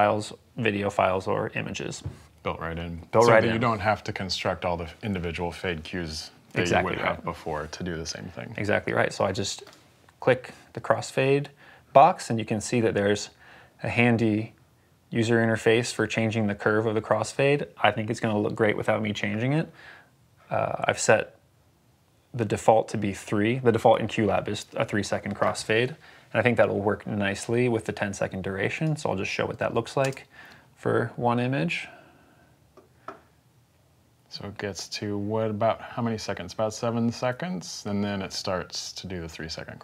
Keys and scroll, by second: 29.9 space.